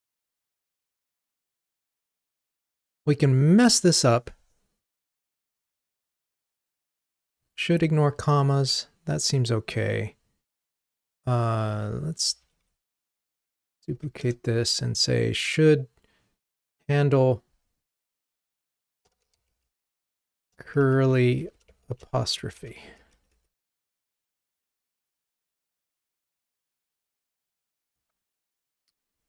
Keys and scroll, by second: 12.4 alt+Up, 13.5 super+d.